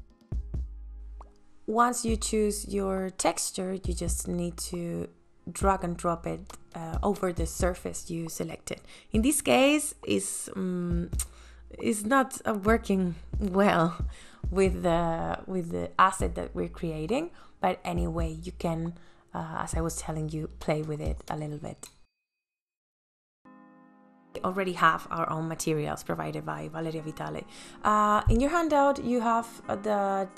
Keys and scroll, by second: 5.8 space, 18.9 ctrl+z, 20.6 ctrl+s.